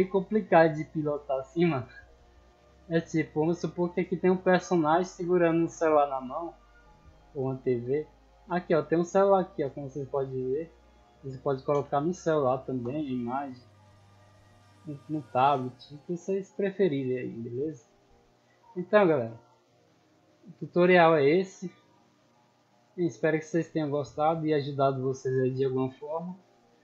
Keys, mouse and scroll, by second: 0.0-0.7 typing, 2.4 d, 3.4 a, 4.6 d, 5.6 d, 7.4 a, 7.9 Escape, 8.2 middle click, 10.3-11.1 drag, 12.8 p, 13.2 w, 14.0 d, 15.1 d, 16.1 d, 16.6 d, 18.1 a, 18.9 Escape, 19.6 middle drag, 19.9 scroll down 2, 21.0 right click, 22.9 click, 24.8 click, 26.3 click.